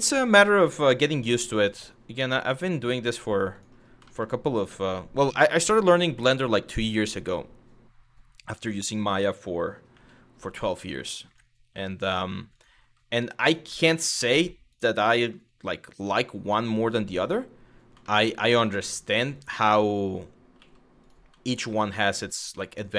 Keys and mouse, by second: 0.0 click, 0.6 g, 1.3 click, 1.9 click, 2.7 click, 3.1 click, 3.8 shift+middle click, 9.5 e, 10.9 click, 11.4 e, 13.1 click, 14.3 click, 14.8 shift+middle click, 17.8 shift+middle click, 18.7 2, 19.0 click, 19.5 click, 20.2 f, 21.2 shift+click, 21.4 f, 21.8 click.